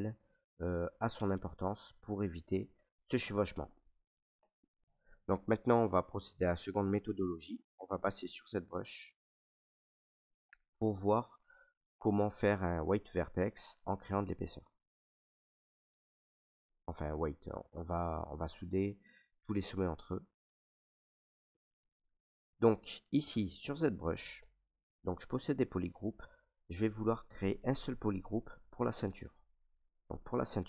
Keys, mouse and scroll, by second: 0.5 middle click, 2.1 middle click, 4.3 Tab, 4.8 ctrl+right click, 14.5 alt+Tab, 16.3 ctrl+right click, 18.2 alt+right click, 19.3 right click, 20.2 right click, 20.9 right click, 21.5 alt+right click, 22.3 ctrl+right click, 23.3 ctrl+right click, 24.3 right click, 24.8 alt+right click, 25.8 right click, 26.9 ctrl+right click, 27.4 alt+right click, 28.3 right click, 28.9 alt+right click, 29.7 right click, 30.4 alt+right click.